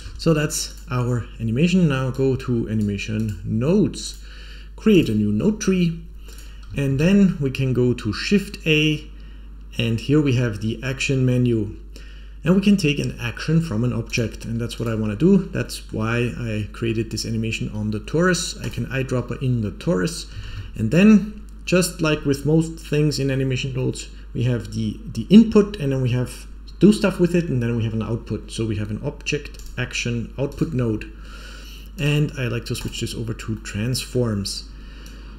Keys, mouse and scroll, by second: 0.6-2.7 drag, 3.1-4.1 drag, 4.8 click, 6.2 click, 6.8 shift+a, 15.0-15.5 scroll up 5, 15.5 middle click, 18.5 click, 20.3 shift+a, 30.8-31.9 scroll up 3, 31.9-32.8 drag, 33.5 middle click, 34.9 click.